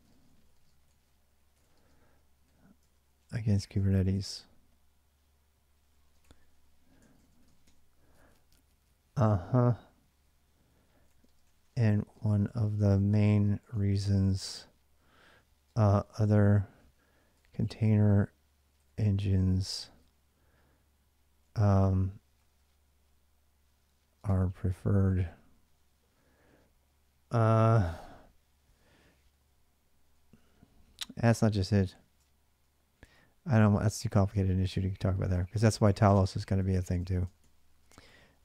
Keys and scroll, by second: 0.0-8.0 typing, 10.3-19.9 typing, 20.9-25.1 typing, 30.8-38.4 typing, 34.6 ctrl+[, 34.8 ctrl+j.